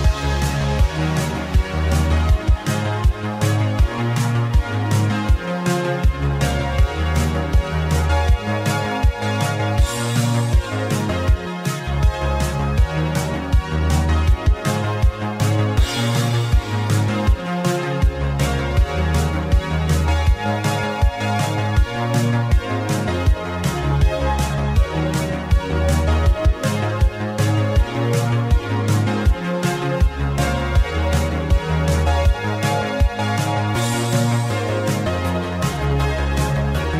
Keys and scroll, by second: 6.3 c, 13.8 m, 20.8 KP_5, 20.9 Return, 23.6 n, 23.7 e, 27.8 KP_5, 27.9 Return, 33.8 KP_9, 33.9 Return.